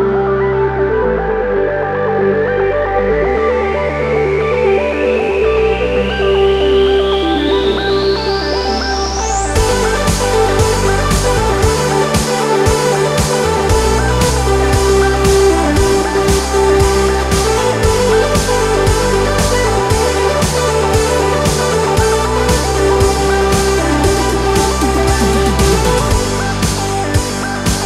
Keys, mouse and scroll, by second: 2.6 alt+scroll up 1, 4.3 alt+click, 12.4 alt+scroll down 1, 14.4 alt+scroll down 1, 15.3 alt+scroll up 1, 18.4 right click, 20.9-27.8 drag.